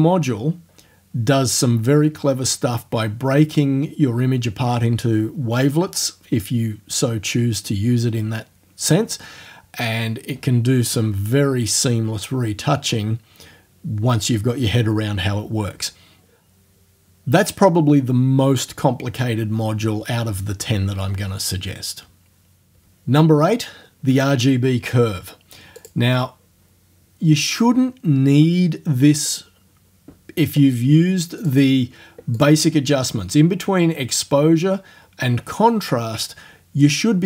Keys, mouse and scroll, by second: 25.0 scroll down 2, 25.8 click, 31.4 click, 32.4 click.